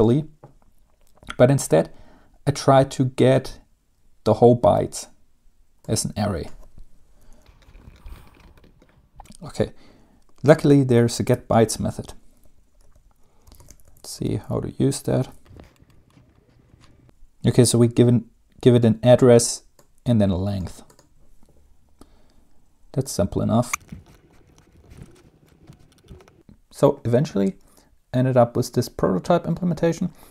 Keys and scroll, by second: 7.9-9.4 typing, 11.4 Return, 13.1 Home, 13.4-15.9 typing, 15.0 End, 23.8-24.6 typing, 24.8 Tab, 24.8 Down.